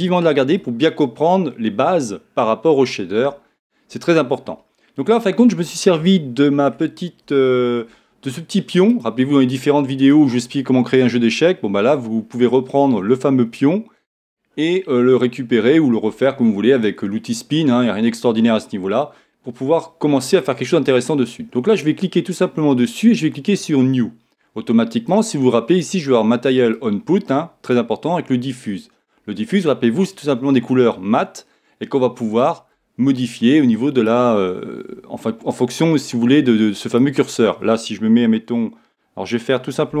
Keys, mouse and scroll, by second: 8.9-10.8 drag, 10.0-11.8 right drag, 11.8-18.0 middle drag, 23.5-28.6 drag, 32.4-34.2 drag, 36.9-38.7 drag, 38.8-40.0 drag.